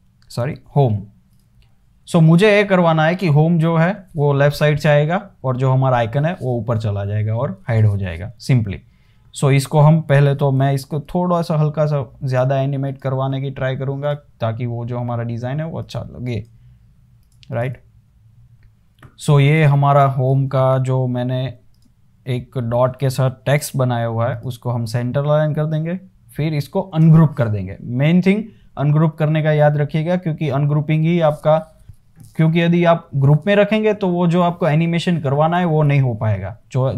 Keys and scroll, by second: 0.0-1.3 typing, 10.5 o, 22.4-23.3 scroll down 1, 23.9 super+g, 27.2 shift+super+g.